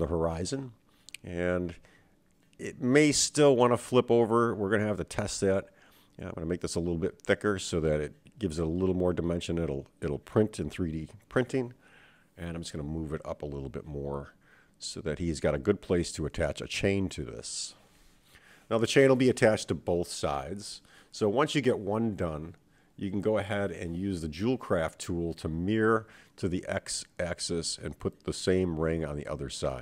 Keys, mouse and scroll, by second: 0.3 g, 2.3 KP_1, 3.6-5.5 scroll up 3, 5.7 s, 8.7-9.9 drag, 10.7 KP_7, 12.4 g, 20.9 scroll down 2, 23.8 Tab, 24.3 click, 25.4-27.1 drag, 27.9 click, 29.7-29.8 scroll up 3.